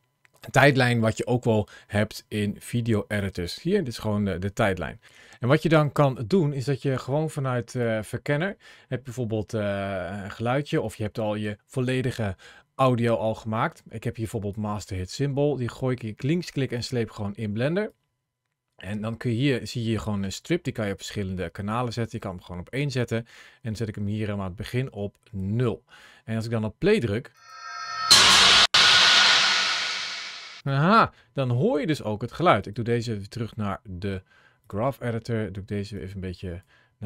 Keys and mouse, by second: 3.0-5.0 drag, 19.5 click, 27.1 click, 30.5 click, 32.5-34.5 drag, 35.9 click.